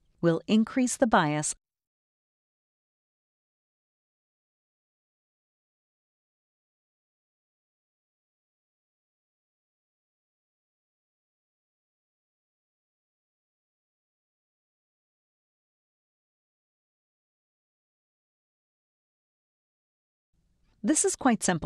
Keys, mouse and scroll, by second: 0.0-1.4 drag, 1.4 1, 3.2 click, 4.2 1, 8.2 click, 9.0 scroll up 2, 9.0 scroll down 2, 9.4 space, 9.6 click, 11.7 click, 16.4 click, 17.0 click, 17.5 click, 18.2 click, 18.9 click, 19.5 click, 20.3 space.